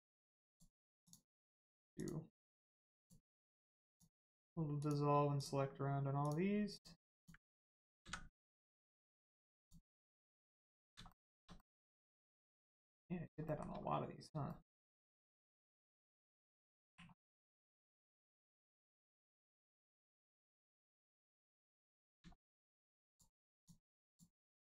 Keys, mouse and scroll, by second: 1.9 shift+click, 3.0 shift+click, 3.8 shift+click, 4.7 shift+click, 7.1 shift+click, 7.9 x, 9.5 click, 10.4 scroll down 1, 11.0 shift+middle click, 11.5 middle click, 11.5 middle click, 11.9-12.4 scroll up 1, 12.5 middle click, 13.4 shift+middle click, 13.7 scroll up 1, 14.4 shift+middle click, 16.1 scroll down 1, 17.1 middle click, 17.1 scroll down 1, 17.6 middle click, 18.7 shift+middle click, 19.0-19.3 scroll up 1, 19.4 middle click, 20.0 shift+middle click, 20.3 middle click, 20.4 middle click, 21.5 click, 21.9 middle click, 22.3 shift+middle click, 23.5 shift+click, 24.0 shift+click.